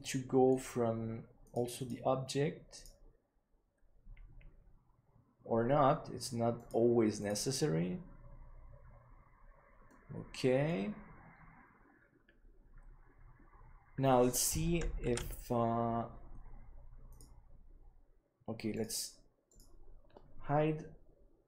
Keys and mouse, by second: 1.8-4.8 drag, 9.8-10.6 middle drag, 15.8 ctrl+s, 17.0-21.4 drag.